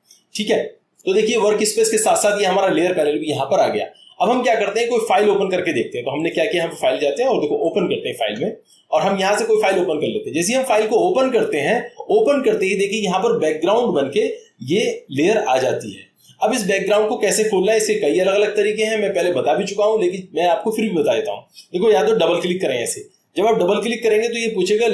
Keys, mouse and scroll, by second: 6.2 click, 10.2 click, 22.4-23.6 drag.